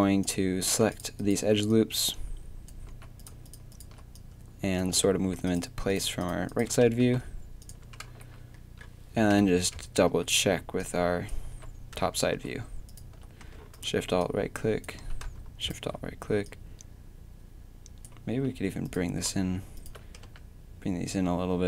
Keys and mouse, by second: 2.9 a, 6.9 g, 7.8 Tab, 8.1 z, 9.3 KP_7, 9.6 Tab, 10.1 z, 11.5 a, 13.6-14.8 right drag, 15.0-18.0 right drag, 15.0 a, 18.3 a, 20.2 g.